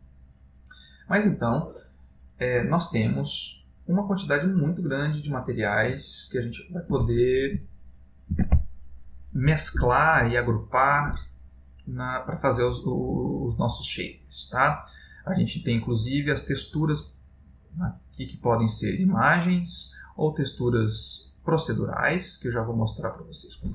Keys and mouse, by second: 0.5 click, 11.2 shift+a.